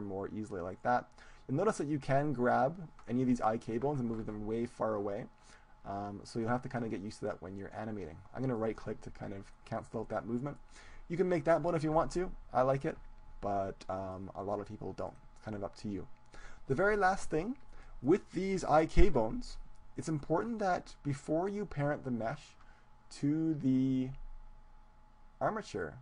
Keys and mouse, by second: 8.6-10.9 right drag, 9.5 click, 10.4-11.8 middle drag, 12.2-16.0 middle drag, 17.6-19.8 middle drag, 19.0 KP_1.